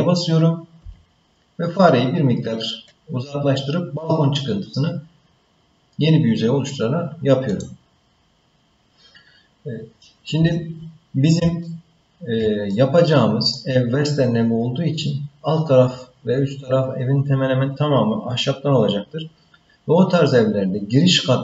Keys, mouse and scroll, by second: 0.8 e, 11.6 shift+middle click, 12.7 middle click.